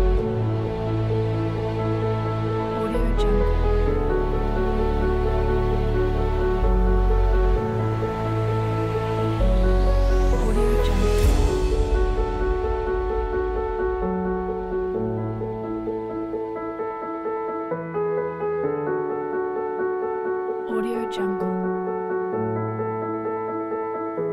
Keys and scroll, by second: 2.6 shift+space, 5.9 space, 10.3 shift+Delete, 12.7 alt+shift+super+k.